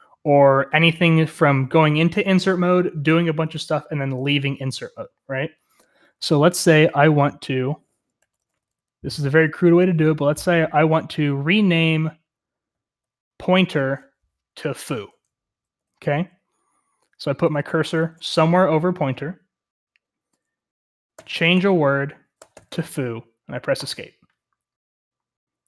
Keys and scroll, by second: 6.8-7.2 typing, 8.4-10.6 typing, 12.7 typing, 15.7-18.0 typing, 20.9-23.2 typing, 23.7 Escape.